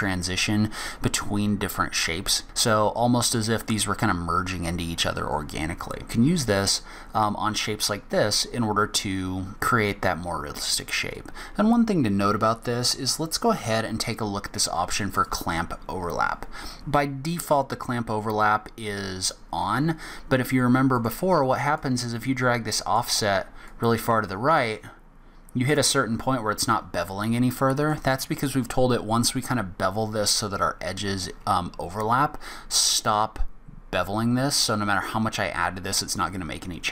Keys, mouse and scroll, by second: 8.8-9.2 scroll down 4, 9.3 scroll up 3, 15.1 click, 16.8 scroll up 1, 20.9 click, 21.8 click, 23.6 click, 34.6 click.